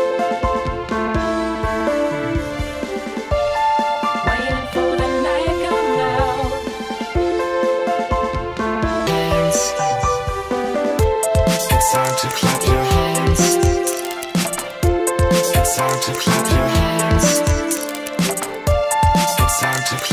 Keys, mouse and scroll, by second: 1.7 click, 6.3 click.